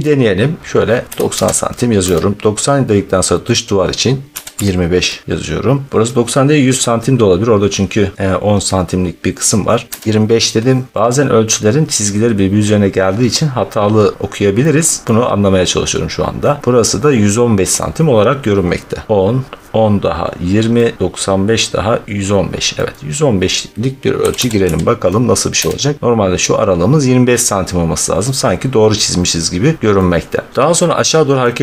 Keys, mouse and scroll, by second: 0.6 scroll, 1.1 typing, 2.0 Return, 4.2-4.5 typing, 9.9 Return, 11.0 scroll, 11.5 middle click, 13.4 middle click, 14.5-15.2 scroll, 17.0-17.5 scroll, 17.7 scroll, 21.1 middle click, 21.3 scroll, 22.9-23.4 scroll, 24.1-25.4 typing, 29.8 scroll, 30.6 scroll, 31.3-31.6 scroll.